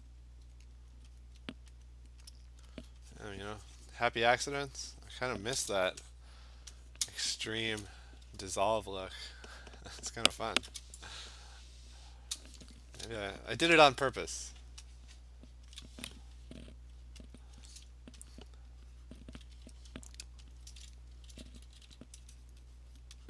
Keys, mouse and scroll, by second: 0.1 click, 1.0 alt+click, 1.2 click, 1.9 alt+click, 2.4 alt+click, 2.8 alt+click, 4.2 click, 4.4 click, 4.7 click, 4.9 click, 5.2 click, 6.6 click, 7.1 click, 7.8-10.9 scroll, 12.4-15.6 click, 13.6 click, 14.3 click, 14.4 click, 15.3 middle click, 15.7 click, 15.8 click, 15.9 click, 17.4 alt+click, 18.4 click, 19.2 click, 20.6 alt+click, 21.4 [, 21.5 [, 21.7 [, 21.9 [, 22.5 click, 23.0 click.